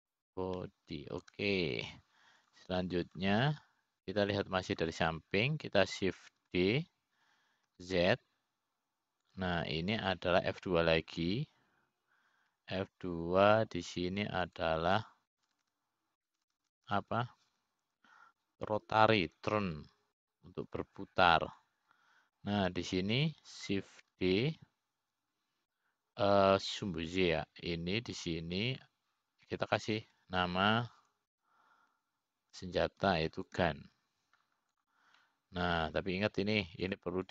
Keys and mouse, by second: 5.0 click, 8.9 shift+d, 15.1 F2, 18.0-19.5 typing, 26.8 shift+d, 32.8 F2.